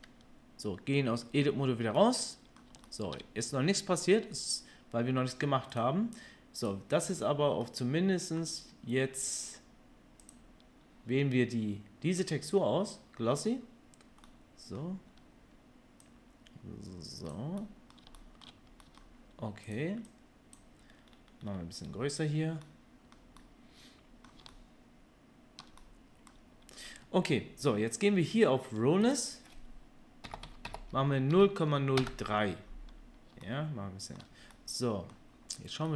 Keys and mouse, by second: 1.3 Tab, 5.8 middle click, 6.1-10.4 drag, 10.4-16.0 middle drag, 16.0-19.7 drag, 19.7 middle click, 20.1-35.9 drag.